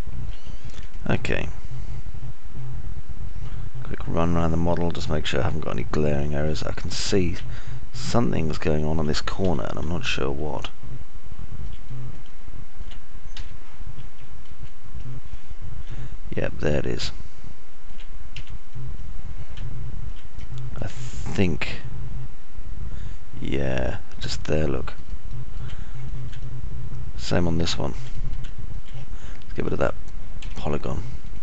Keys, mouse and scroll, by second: 1.1 alt+click, 1.1 alt+middle click, 1.1 alt+right click, 2.9-7.9 alt+drag, 2.9-7.9 alt+middle drag, 2.9-7.9 alt+right drag, 8.4 middle click, 8.4-9.8 scroll up 4, 8.9-10.4 alt+middle drag, 10.9 F3, 11.4-13.1 alt+drag, 11.4-13.1 alt+middle drag, 11.4-13.1 alt+right drag, 15.3 F3, 15.4 F4, 16.3 F3, 17.3-19.9 alt+middle drag, 21.1 alt+middle click, 22.1 middle click, 22.4-26.8 alt+middle drag, 23.1-26.8 alt+drag, 23.1-26.8 alt+right drag, 26.9 alt+click, 26.9 alt+middle click, 26.9 alt+right click, 27.8-28.6 alt+drag, 27.8-29.4 alt+middle drag, 27.8-28.6 alt+right drag, 29.3 alt+click, 29.3 alt+right click, 29.8 middle click, 30.1 alt+click, 30.1 alt+middle click, 30.1 alt+right click.